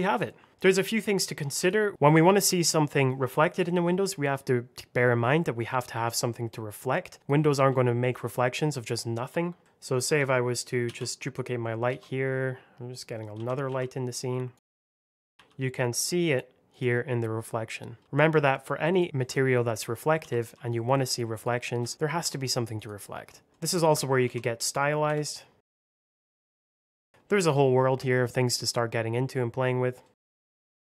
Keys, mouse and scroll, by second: 0.5 shift+middle click, 0.7 middle click, 1.5 click, 5.3 middle click, 5.7 scroll down 1, 5.9 scroll up 1, 6.0 middle click, 6.8 click, 7.7 alt+middle click, 8.3 shift+middle click, 9.6 middle click, 10.8 shift+d, 11.2 click, 11.9 s, 12.8 click, 13.2 s, 13.6 y, 14.4 click, 14.8 KP_1, 14.9 Return, 15.0 space, 15.1 alt+middle click, 15.2 r, 15.3 click, 15.4 g, 16.6 click, 17.9 r, 18.8 click, 19.2 middle click, 20.1 s, 20.3 x, 21.2 click, 21.8 alt+middle click, 22.0 r, 22.7 click, 23.2-25.9 typing, 23.5 middle click, 25.8 click, 26.1 click, 26.4 click, 29.3 middle click, 30.1 click, 30.2-30.9 typing, 30.2 click, 30.4 Return, 30.5 alt+z, 30.6 scroll up 1.